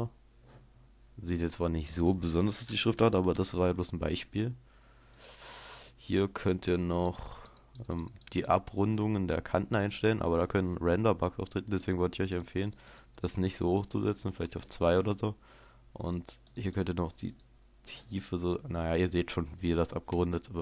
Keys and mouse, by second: 0.0-1.4 drag, 1.4-3.4 middle drag, 3.4 s, 5.3-7.2 drag, 10.0-11.0 drag, 11.8-14.9 drag, 16.2-19.2 drag, 19.9 middle click.